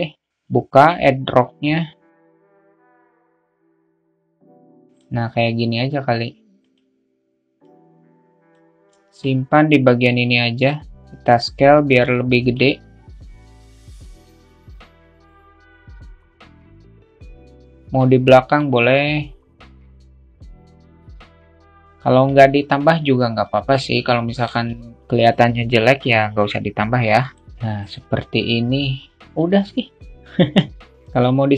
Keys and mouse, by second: 0.5 click, 3.1-4.7 drag, 7.4 click, 8.8 alt+shift+middle click, 8.9 alt+shift+KP_0, 9.4 click, 11.0 s, 12.0 alt+middle click, 13.9-14.5 alt+middle drag, 14.7 alt+shift+middle drag, 15.8 middle click, 16.6 alt+s, 16.7-17.2 alt+middle drag, 17.2-19.1 drag, 19.6-20.6 drag, 20.8-24.3 drag, 23.1 s, 30.9 alt+middle click, 31.3 drag.